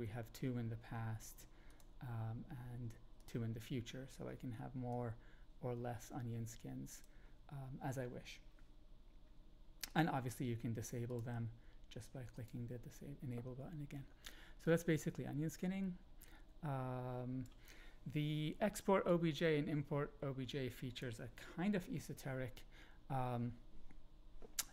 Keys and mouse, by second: 1.8-4.0 drag, 4.8-7.0 drag, 9.9-10.2 drag, 11.2-12.8 drag, 14.6-17.4 drag, 19.0-21.0 drag.